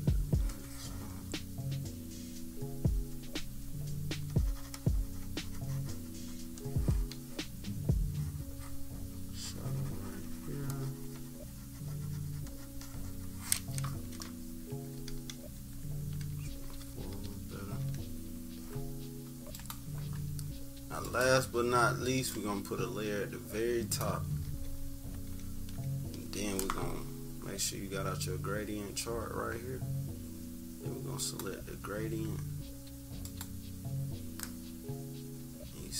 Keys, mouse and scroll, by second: 1.3-6.5 drag, 10.6-14.8 drag, 14.9-18.0 typing, 15.8 scroll up 1, 17.4 scroll down 1, 19.5 click, 21.0 click, 21.2 scroll down 1, 22.2-23.9 drag, 24.4 -, 24.7 -, 25.1 scroll down 1, 25.2 =, 26.0 scroll down 1, 31.1 click, 33.2-35.9 drag.